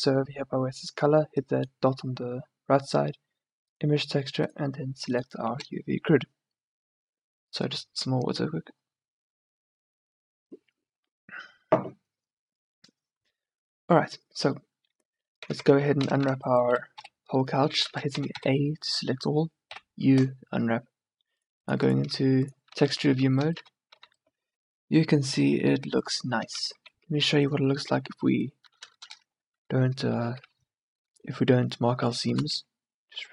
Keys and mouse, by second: 3.4 middle click, 15.6 Tab, 15.8 Tab, 16.2 a, 16.4 a, 17.1 u, 18.3 a, 18.5 a, 19.8 u, 23.0 a, 23.2 Tab, 23.7 a, 24.2 a, 26.7 Tab, 28.7 a, 28.9 a, 32.6 ctrl+e.